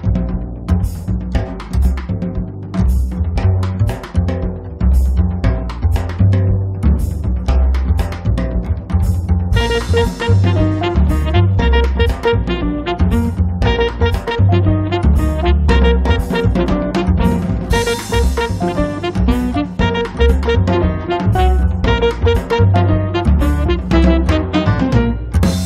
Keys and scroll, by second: 13.9-14.9 typing, 23.2 space.